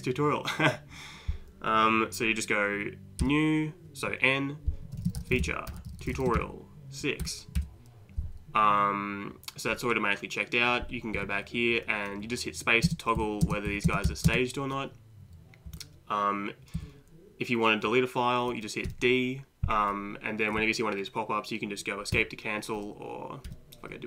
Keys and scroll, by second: 3.2 n, 4.7-7.2 typing, 7.6 Return, 11.2 Left, 12.9 space, 13.2 Down, 13.4 space, 13.7 Up, 13.9 space, 14.1 Down, 15.7 Up, 16.8 Down, 18.9 d, 22.1 Escape, 23.5 d.